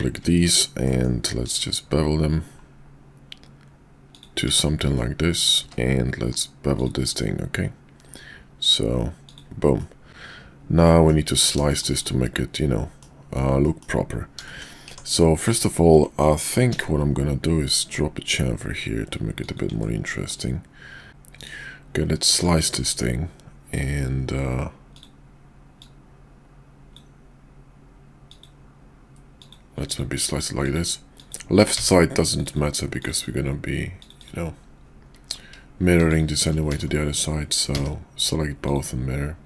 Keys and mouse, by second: 0.8 ctrl+b, 4.4 Tab, 4.9-5.5 middle drag, 5.6 q, 9.8-11.1 middle drag, 12.0-13.0 middle drag, 13.6 middle click, 14.9 Tab, 16.6 ctrl+b, 19.7 Tab, 20.3-21.1 middle drag, 21.4-22.3 drag, 24.9 click, 25.8-27.0 drag, 36.1 shift+click, 36.7 alt+x, 38.7 click.